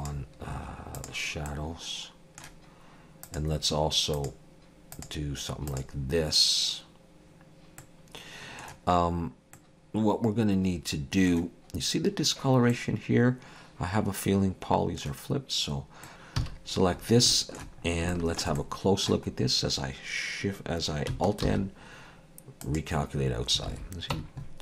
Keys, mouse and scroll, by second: 0.0 click, 1.5 middle click, 3.3 click, 7.8 middle click, 9.2-9.6 scroll down 1, 9.6 middle click, 12.7 middle click, 16.0 middle click, 16.1 Tab, 16.1 click, 16.4 a, 16.9-17.3 scroll up 2, 17.3 shift+middle click, 17.8 scroll up 2, 18.1 shift+middle click, 18.6 middle click, 19.3-19.8 scroll up 1, 21.5 alt+n, 23.7 alt+a, 24.2 Tab.